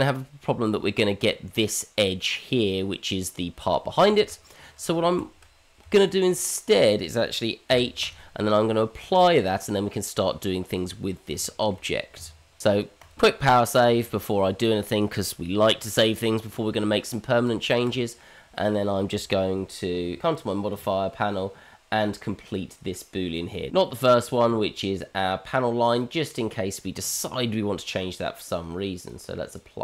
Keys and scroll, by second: 4.3 ctrl+z, 5.4 ctrl+z, 5.8 Tab, 7.7 h.